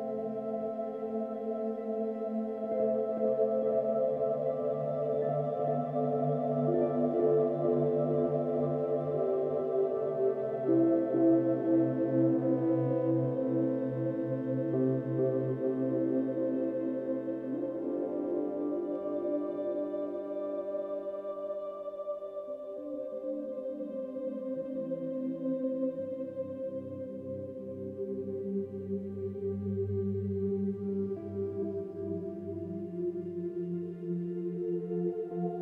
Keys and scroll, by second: 4.5 ctrl+-, 10.4 ctrl+-, 10.6 ctrl+=, 30.5 ctrl+-, 30.6 ctrl+=, 30.7 ctrl+-, 31.0 ctrl+-, 32.4 ctrl+-, 32.8 ctrl+=, 34.7 ctrl+=, 34.8 ctrl+-, 35.1 ctrl+s.